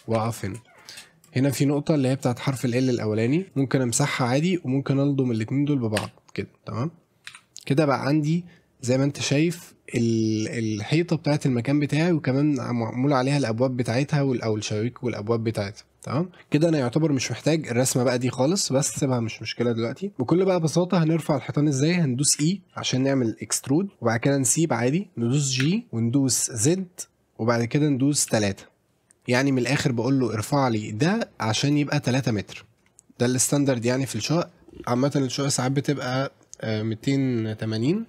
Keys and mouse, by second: 0.2 a, 0.6 shift+middle click, 1.2-3.5 drag, 3.5 Delete, 4.2 a, 4.5 click, 6.0 f, 7.3 a, 7.9-9.7 middle drag, 16.3 middle click, 16.4 KP_7, 19.6 middle click, 20.7 middle click, 22.3 e, 25.6 g, 26.7 z, 28.3 KP_3, 29.5 click, 30.5-31.7 drag, 33.2 middle click.